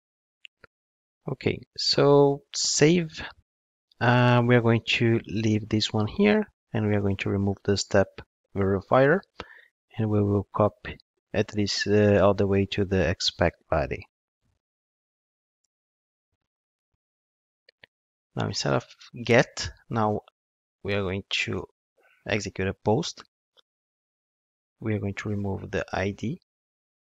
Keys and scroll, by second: 13.0 super+c, 14.4 super+v, 21.5 Return, 26.2 super+x.